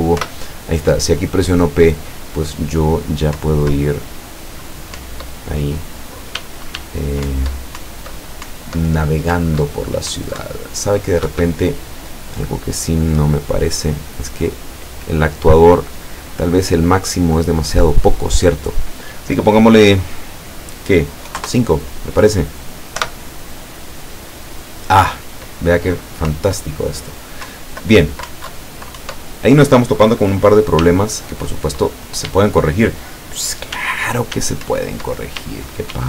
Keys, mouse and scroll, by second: 0.2 p, 3.4 Down, 5.1 Up, 6.4 w, 7.3 Up, 9.4 Up, 11.4 Escape, 13.9 right click, 14.8 right click, 16.8-17.6 drag, 18.1 click, 21.3 KP_5, 21.4 KP_Enter, 23.0 p, 26.4 Up, 27.6 Down, 28.1 Left, 28.4 Up, 28.6 Left, 29.1 Up, 30.9 w, 32.4 e, 33.8 s, 34.8 Up, 35.5 w.